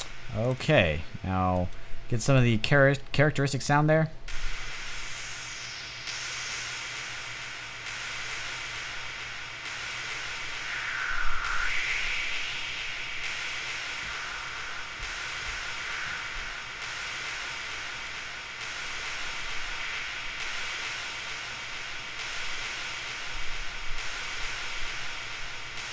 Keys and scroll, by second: 2.6 space, 3.7 space, 6.3 typing.